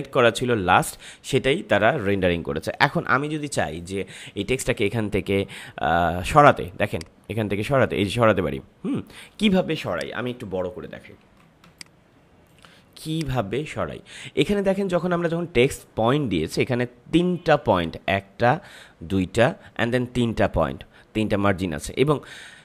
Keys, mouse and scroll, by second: 4.5 click, 6.8-9.8 drag, 10.9 ctrl+=, 11.6 space, 11.7 click, 12.1 space, 13.1 click.